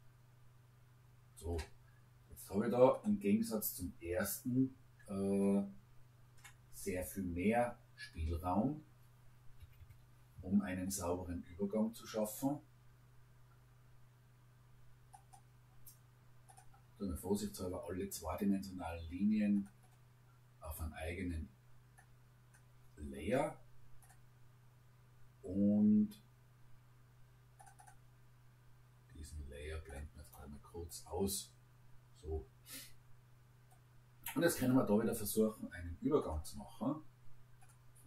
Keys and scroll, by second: 9.6 Escape.